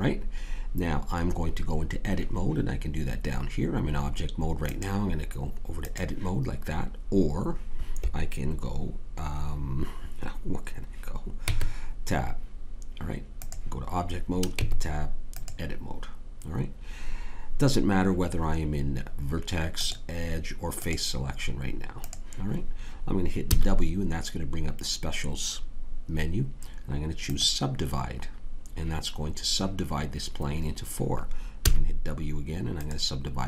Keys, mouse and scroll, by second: 4.6-9.1 drag, 11.4 Tab, 14.5 Tab, 19.7-23.5 drag, 23.5 w, 31.6 w.